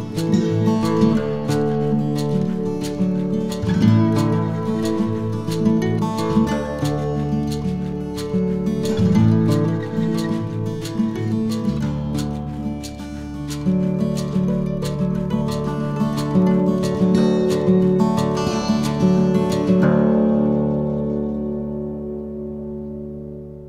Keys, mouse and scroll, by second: 0.4 Tab, 1.4 alt+c, 4.4 Tab, 4.8-5.3 scroll up 4, 5.3 2, 5.6-6.3 scroll up 4, 7.5 alt+right click, 9.3 shift+g, 10.8-12.0 scroll down 4, 12.2-13.6 scroll up 2, 14.2 ctrl+b, 19.8 Tab, 20.4 scroll down 2, 20.9 a, 21.7-22.5 scroll down 3, 23.2 shift+middle click.